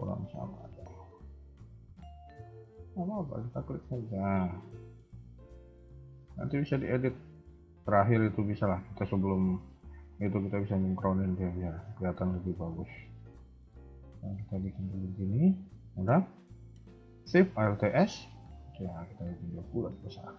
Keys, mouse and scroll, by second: 2.5 alt+click, 2.9 s, 4.6 alt+click, 5.1 s, 6.1 alt+click, 6.5 s, 7.8 alt+click, 8.4 a, 8.6 a, 9.4 scroll down 1, 9.6 shift+middle click, 10.1-10.7 scroll up 1, 11.0 alt+click, 11.3 scroll down 2, 11.6 shift+middle click, 11.9 scroll up 1, 12.8 middle click, 14.7 KP_3, 14.8 KP_1, 15.6 middle click, 17.7 alt+shift+s, 19.8 KP_1, 20.1 KP_3.